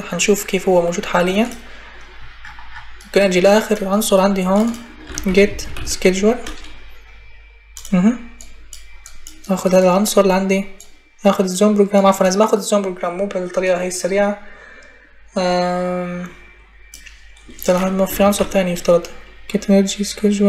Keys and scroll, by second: 4.6-6.1 typing, 17.6-18.7 typing.